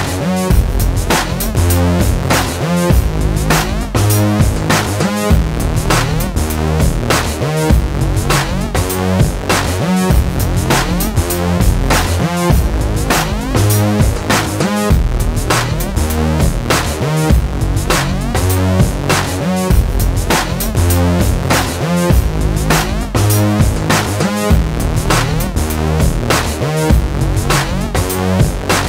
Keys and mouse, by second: 0.0 middle click, 0.3 middle click, 0.5 Tab, 1.1-2.1 middle drag, 2.7 ctrl+i, 3.0 h, 3.2 middle click, 3.4 Tab, 4.3 ctrl+r, 5.3 middle click, 5.7 k, 7.2 k, 7.9 click, 8.2 middle click, 8.9 Tab, 9.7 alt+h, 9.9 a, 10.0 right click, 10.2 right click, 10.4 middle click, 10.9 ctrl+s, 11.1 click, 12.2 ctrl+i, 12.5 h, 12.7 click, 12.9 Tab, 14.0 Tab, 14.9 Tab, 16.1 e, 17.2 right click, 17.4 ctrl+l, 17.7 a, 17.9 ctrl+Tab, 18.5 p, 19.1 right click, 19.4 Tab, 20.0 a, 20.7 KP_1, 20.7 z, 21.4 right click, 21.9-23.3 typing, 23.7 middle click, 23.8 ctrl+s, 24.2 middle click, 24.5 ctrl+r, 25.7 ctrl+r, 26.8 ctrl+2, 27.1 click, 27.9 Tab, 28.1 alt+h.